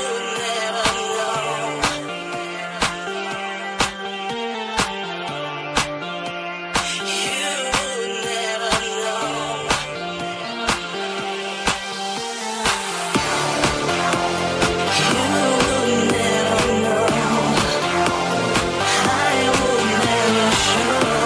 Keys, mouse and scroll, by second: 1.1 middle click, 1.5 alt+middle click, 1.7 middle click, 1.8-17.4 middle drag, 2.6 Tab, 14.4 right click, 14.6 Tab, 15.5 ctrl+Tab, 17.4-21.2 shift+drag.